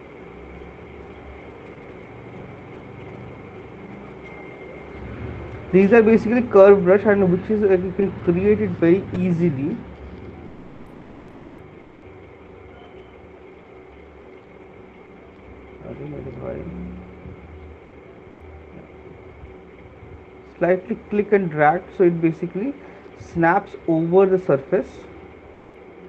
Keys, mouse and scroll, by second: 0.9-1.9 scroll, 1.9 click, 9.0 click, 9.8 right click, 10.1 click, 11.1 alt+click, 13.1 click, 13.4 click, 16.0 ctrl+z, 18.8 click, 22.9 click.